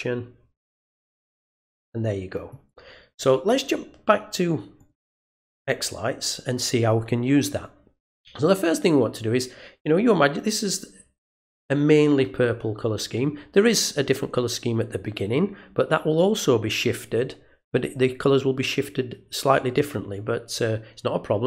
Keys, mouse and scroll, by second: 4.7 click.